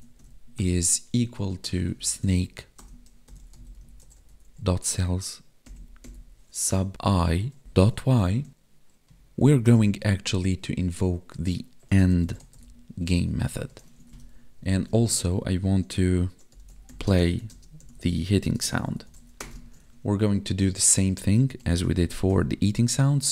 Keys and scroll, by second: 1.5 space, 6.9 Right, 8.2 Right, 13.0 Tab, 13.9 ctrl+s, 14.1 Down, 14.9 space, 17.1 space, 17.5 space, 18.6 space, 19.6 ctrl+s.